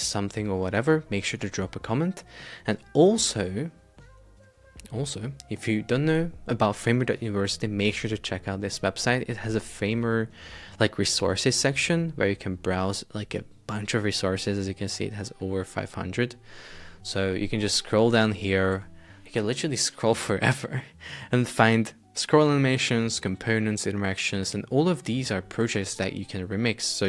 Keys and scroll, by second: 18.8 super+Tab.